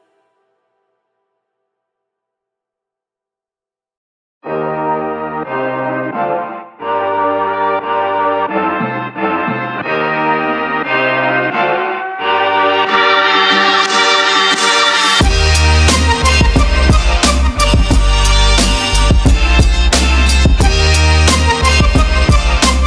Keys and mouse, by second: 0.2 Tab, 0.6 2, 1.1 click, 2.8 g, 6.8 shift+right click, 7.4 click, 8.5 shift+z, 8.8 KP_3, 11.2 ctrl+z, 12.0 g, 15.3 shift+middle click, 16.4 middle click, 17.1 shift+z, 18.4 ctrl+middle click, 19.0 middle click, 19.7 Tab, 21.4-21.9 shift+middle drag.